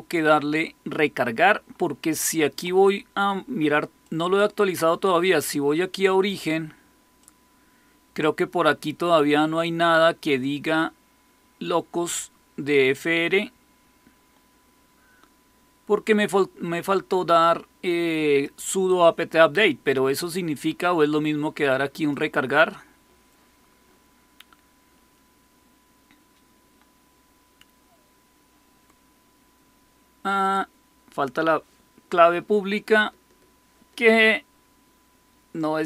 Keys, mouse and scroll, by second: 4.0 click, 7.1-8.5 drag, 12.9-18.4 drag, 21.9 click.